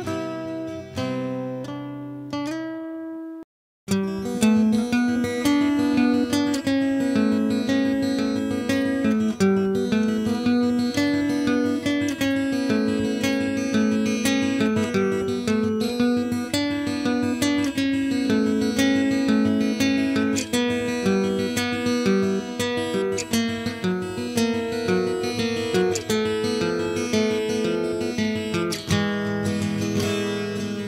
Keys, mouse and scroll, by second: 0.6-1.6 drag, 10.4 Tab, 10.6-12.2 typing, 10.9 Tab, 11.0 click, 11.2 Tab, 13.6-15.6 typing, 15.6 click, 16.7-25.3 typing, 23.9-25.9 drag, 24.5 Tab, 26.3-30.1 drag, 26.5 z, 30.1 z, 30.5 z.